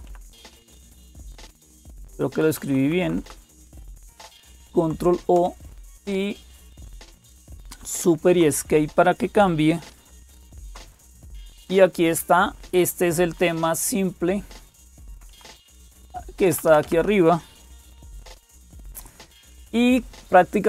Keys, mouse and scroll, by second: 0.0-20.6 typing, 0.0 Left, 2.1 Left, 2.4-4.4 Right, 7.9 ctrl+o, 7.9 Return, 10.2 super+Escape, 10.2 alt+s, 14.9 Down, 15.1 Down, 15.3 Down, 15.5 Up, 15.7 Up, 15.9 Up, 16.3 Down, 16.5 Down, 16.6 Down, 18.3 Escape.